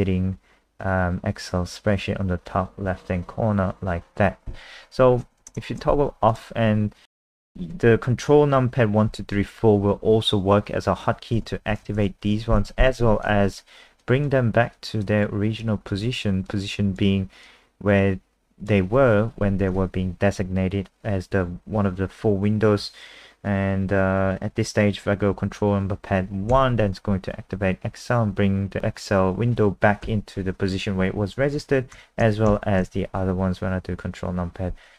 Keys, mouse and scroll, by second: 6.3 click, 11.6 ctrl+KP_1, 11.7 ctrl+KP_2, 11.8 ctrl+KP_3, 12.0 ctrl+KP_4, 13.2 click, 26.5 ctrl+KP_1, 31.9 ctrl+KP_2, 32.2 ctrl+KP_3, 32.5 ctrl+KP_4.